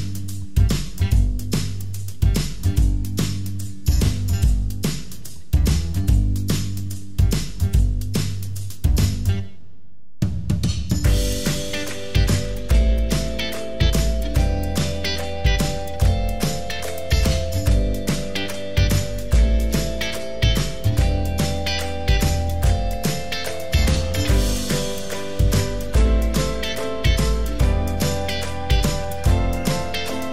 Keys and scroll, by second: 2.0 ctrl+c, 2.1 ctrl+v, 23.8 BackSpace.